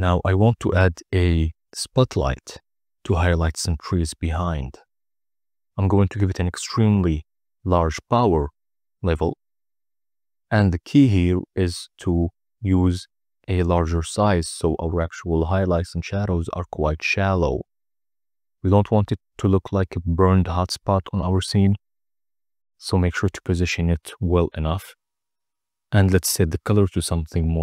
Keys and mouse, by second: 0.3 click, 5.2 click, 5.5 click, 5.8 click, 6.0 click, 6.5 click, 7.0 click, 7.3 click, 7.7 click, 8.3-10.7 typing, 10.0 Return, 12.1 g, 12.2 z, 13.1 click, 13.4 click, 14.2 click, 15.2-17.0 typing, 17.7 right click, 18.0 middle drag, 19.3 g, 19.5 y, 19.9 x, 20.8 KP_0, 21.9 g, 22.1 z, 23.0 click, 24.5 g, 26.9 r, 27.0 r, 27.5 r.